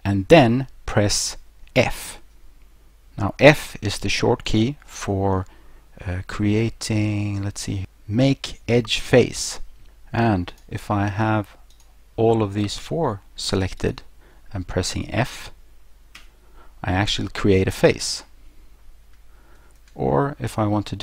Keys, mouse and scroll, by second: 2.0 f, 4.4 click, 9.8 click, 10.5 right click, 11.7 shift+right click, 12.6 right click, 13.8 shift+right click, 16.2 f, 19.6 ctrl+z.